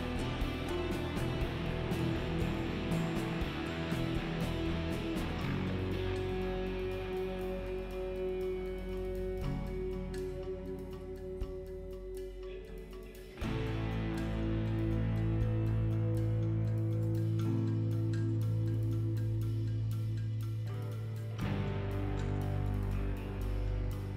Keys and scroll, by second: 11.2 alt+x.